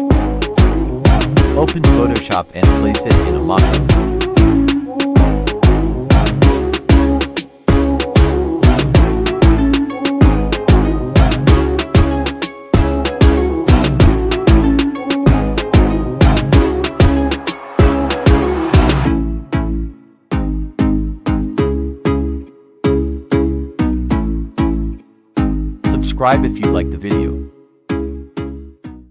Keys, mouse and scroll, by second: 0.1 ctrl+c, 0.6 click, 2.5 click, 4.4 click, 4.5 ctrl+v, 4.9-6.6 drag, 6.6 Return, 7.7 click, 10.1 click, 11.2 space, 12.0 click, 12.7-14.0 typing, 14.3 ctrl+click, 15.4 ctrl+t, 15.8 click, 16.7 Up, 17.7 Return, 18.5 click, 19.1-22.3 typing, 22.3-23.8 drag, 24.9 click.